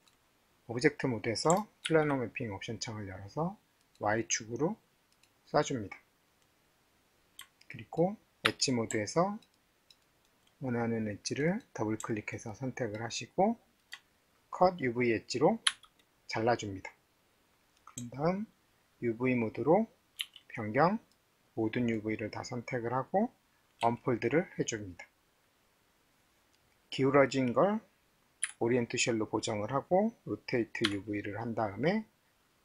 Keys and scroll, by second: 3.1 ctrl+s, 8.5 alt+2, 20.2 alt+4, 23.8 d, 28.4 x, 30.9 c.